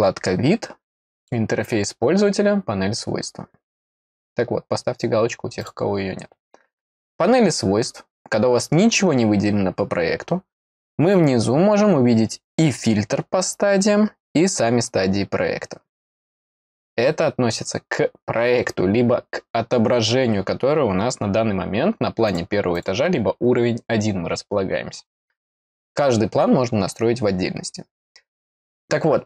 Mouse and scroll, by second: 1.1 click, 5.5 click, 7.1 scroll down 2, 22.2 click, 22.7 click.